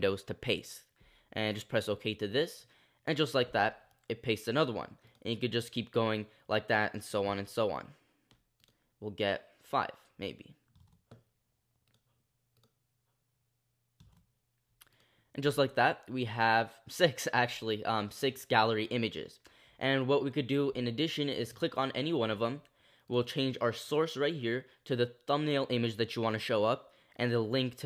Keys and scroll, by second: 7.2 super+v, 10.8 super+v, 16.1 super+v.